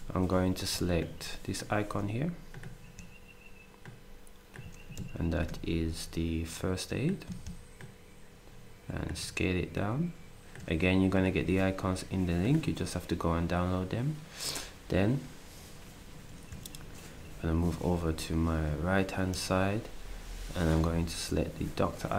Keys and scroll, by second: 5.1 ctrl+shift+d.